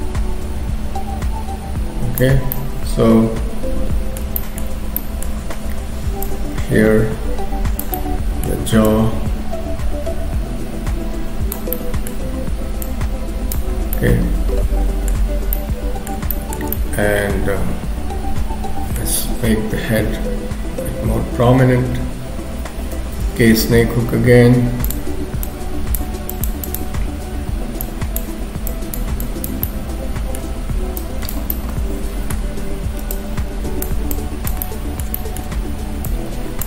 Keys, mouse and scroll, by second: 2.4-4.0 scroll down 3, 2.6 middle click, 4.4 shift+middle click, 4.8 scroll up 2, 5.0 middle click, 5.5-6.2 scroll up 2, 6.2 click, 8.0 middle click, 8.8 click, 11.8 middle click, 12.8 click, 13.8-14.1 scroll down 3, 14.0 middle click, 15.3-15.7 scroll down 2, 15.6 middle click, 16.3 shift+middle click, 16.8 middle click, 19.3 KP_3, 19.6-20.0 scroll up 2, 23.0 k, 23.8 f, 25.5 click, 26.4 click, 27.8 click, 28.7 click, 29.6 middle click, 31.0 click, 31.5 middle click, 33.2 click, 34.2 click, 34.6 middle click, 35.2 shift+middle click, 35.5 scroll up 2, 36.1 click.